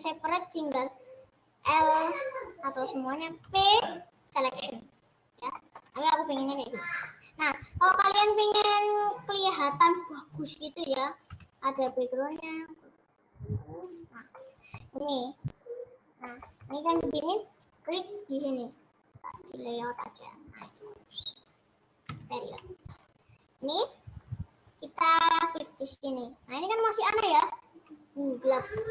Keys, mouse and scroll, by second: 1.7 l, 5.4 p, 5.8-7.3 middle drag, 7.3 scroll down 4, 7.5-11.5 middle drag, 11.5 g, 14.4 middle click, 15.2 scroll up 6, 16.0 scroll down 3, 16.1-19.8 middle drag, 19.8 click, 19.9 middle click, 20.8-21.4 scroll up 4, 21.4-21.7 scroll down 3, 22.1 KP_Decimal, 22.6-23.0 scroll up 5, 23.3-23.7 scroll down 2, 23.7-26.1 middle drag, 26.1 click, 26.8-28.9 middle drag.